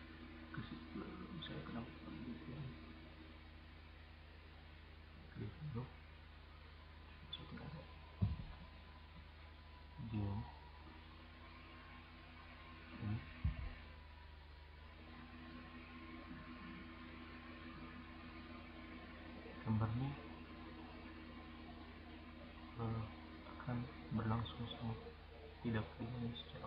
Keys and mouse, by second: 6.5 click, 11.0 right drag, 11.3 click, 11.5-12.5 right drag.